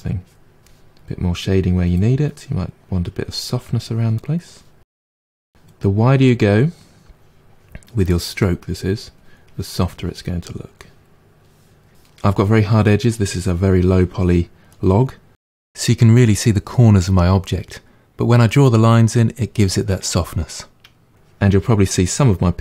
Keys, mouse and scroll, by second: 2.0 middle click, 2.4 click, 3.2 middle click, 3.5-5.0 drag, 5.0 middle click, 5.9-10.2 drag, 10.2-11.8 middle drag, 11.8 click, 14.1-15.4 drag, 15.4-16.6 middle drag, 16.6-19.6 drag, 19.6 middle click, 20.4 click, 20.6-22.4 middle drag, 22.4-22.6 drag.